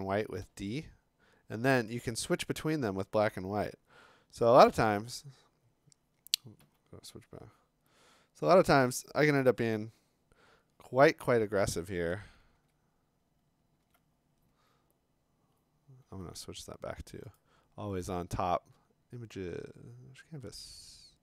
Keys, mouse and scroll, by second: 0.4 d, 1.9 x, 2.2 x, 2.5 x, 3.1 x, 5.1 click, 6.6 b, 11.5-12.0 scroll, 12.6 alt+Tab, 13.8 alt+Tab, 16.3 alt+Tab, 17.4 right click.